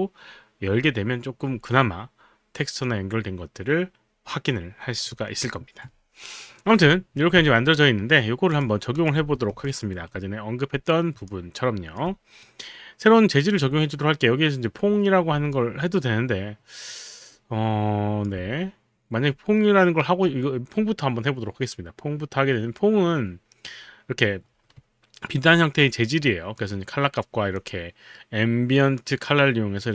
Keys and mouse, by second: 8.5 click, 9.2 f, 9.6 alt+click, 10.6 alt+right click, 11.2 alt+click, 12.4-13.4 right drag, 15.5-26.5 alt+drag, 29.0 click.